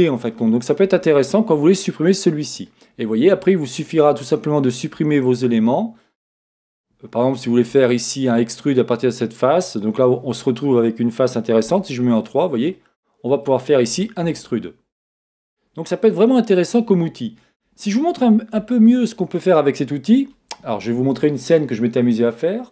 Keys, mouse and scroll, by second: 0.3 middle click, 3.8-4.3 scroll up 1, 5.5 middle click, 6.3-7.8 scroll down 1, 7.8 middle click, 9.6-12.2 middle drag, 11.6 3, 12.2 click, 12.3-22.0 middle drag, 13.5-13.9 scroll up 2, 13.9 e, 15.2 click, 19.3-19.8 scroll down 2, 22.0 click.